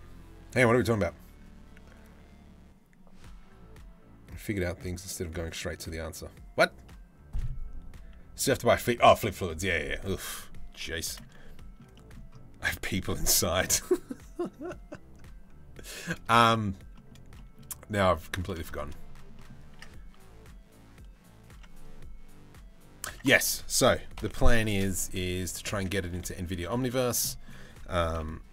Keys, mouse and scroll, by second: 10.5 middle click, 11.1 shift+middle click, 11.5 middle click, 12.3 shift+middle click, 15.9 shift+middle click, 16.5 middle click, 17.0 shift+middle click, 18.2 shift+middle click, 18.9 middle click, 19.3 Tab, 22.7 Tab, 22.9 click, 23.8 ctrl+l, 24.3 shift+d, 25.6 s, 26.9 middle click, 27.7 KP_7.